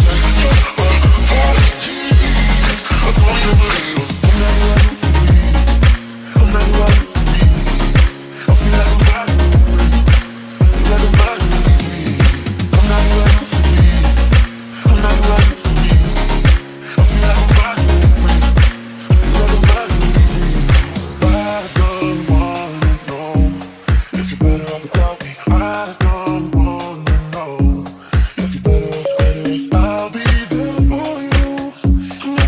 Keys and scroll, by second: 0.0-1.7 typing, 5.4-7.0 typing, 9.6-12.9 typing, 14.0-15.5 typing, 17.2 d, 18.6-19.7 typing, 25.8-27.7 typing.